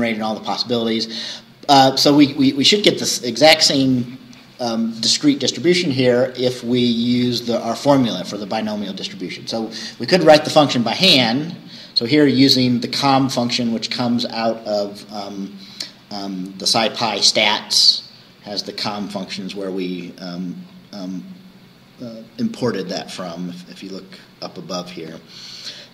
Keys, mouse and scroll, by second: 1.2-1.5 scroll down 2, 2.7-6.4 scroll up 2, 6.4-7.9 scroll up 1, 7.9 scroll down 2, 19.0 scroll down 2, 19.2-19.8 scroll up 4, 20.5 scroll up 2, 23.7-24.6 scroll down 4.